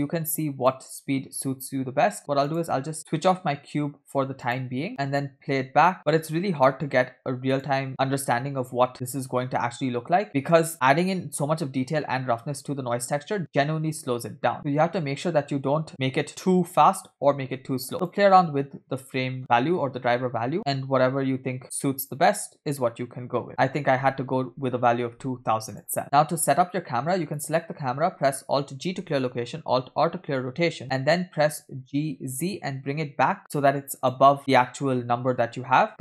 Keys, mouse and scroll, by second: 3.3 click, 4.4 click, 4.9 space, 6.6 space, 7.6-8.7 drag, 9.0 space, 14.5-15.0 scroll down 9, 14.5 space, 15.0-15.8 scroll up 5, 15.9 space, 17.9 space, 18.1-20.5 drag, 20.5 space, 23.5 space, 23.6-26.0 drag, 26.0-26.5 scroll down 3, 26.0 space, 27.5 scroll down 1, 27.5 click, 29.1 alt+g, 30.5 alt+r, 30.9-31.5 scroll down 1, 31.5-31.9 scroll down 1, 32.0 g, 34.4 middle click, 35.2-35.9 scroll down 4, 35.9-36.0 scroll up 2.